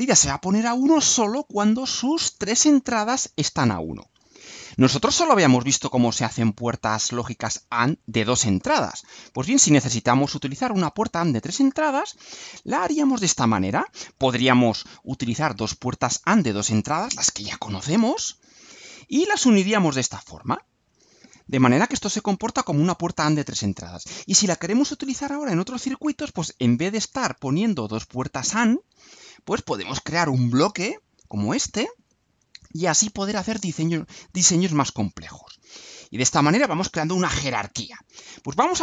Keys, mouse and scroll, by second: 11.7 click, 30.1 click.